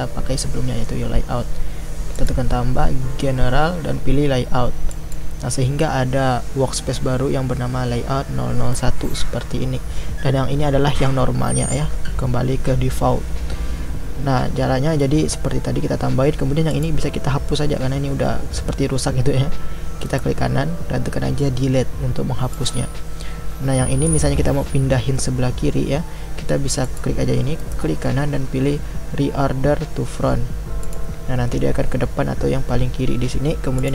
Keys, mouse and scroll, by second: 16.8 click, 22.7-24.1 right drag, 24.1-30.9 drag, 30.9-33.7 right drag, 33.7-33.9 drag.